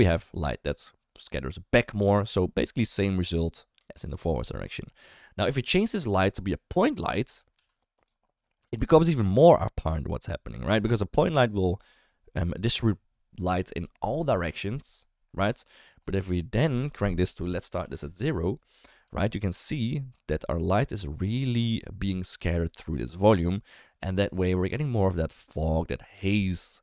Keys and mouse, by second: 3.1 click, 6.9 click, 7.5 g, 8.9 click, 16.8-17.9 drag, 19.0 g, 23.1 click.